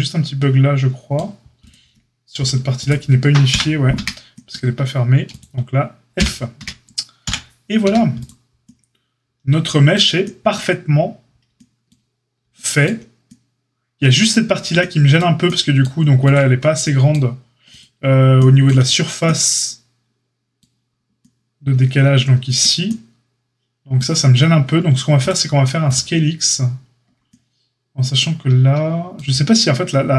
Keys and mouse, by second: 1.5 click, 1.7-2.7 middle drag, 2.7 click, 2.8-5.3 middle drag, 3.5 KP_Divide, 3.9 Tab, 5.3-6.1 drag, 6.1-16.2 middle drag, 6.1 f, 6.5 Tab, 7.2 KP_Divide, 7.8 a, 16.2 click, 16.3-30.1 middle drag.